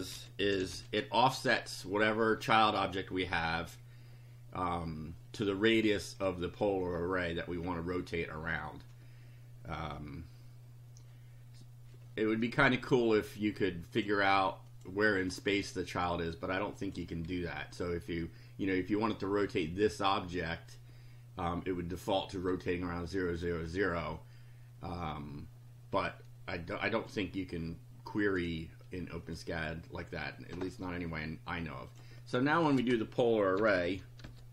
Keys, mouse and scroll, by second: 0.0-1.2 typing, 13.9 click, 14.6 click, 15.2 click, 16.8 click, 29.2 click, 30.6 scroll down 2, 31.9 click, 32.7 Return, 33.3-34.5 typing.